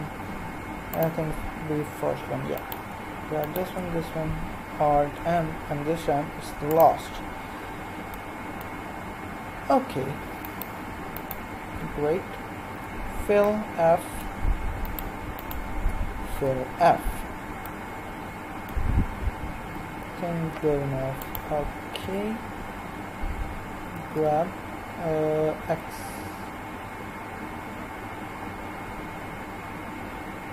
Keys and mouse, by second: 2.5-5.1 right drag, 5.1 alt+m, 10.4-13.7 right drag, 12.7 f, 14.9-16.1 right drag, 16.2 right click, 16.3 f, 17.1 right click, 17.7 middle click, 19.9 KP_1, 22.0 l, 23.8 g.